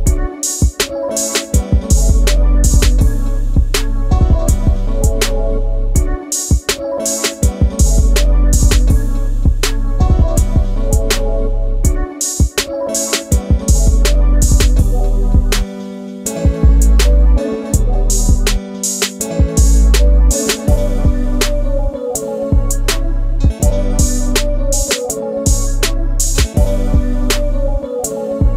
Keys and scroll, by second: 0.5 space, 3.9 r, 13.3 s, 16.7 ctrl+space, 24.4 space, 24.8 v.